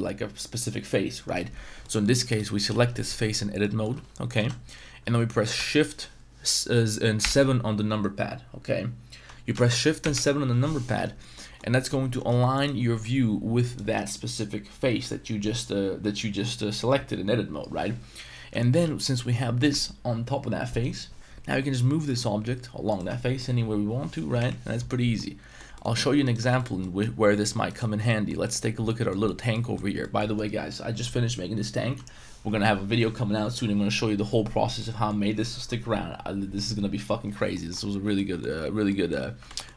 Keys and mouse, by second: 1.8 middle click, 2.3 right click, 2.7 z, 3.6 middle click, 4.4 z, 7.2 shift+KP_7, 10.0 shift+KP_7, 11.3 shift+middle drag, 12.3 Tab, 13.6 right click, 18.8 g, 24.3 KP_1, 25.1-25.6 middle drag, 25.7 shift+middle click, 26.2 shift+right click, 26.5 x, 26.8 middle drag, 27.7 right click, 28.0 middle drag, 28.4 shift+middle drag, 28.9 middle drag, 29.2 shift+middle drag, 29.5 middle drag, 30.0 shift+middle drag, 34.8-35.1 middle drag, 37.5 middle drag, 38.1 Tab, 38.1 middle drag, 38.8 Tab, 38.9 middle drag, 39.4 Tab, 39.4 shift+middle drag.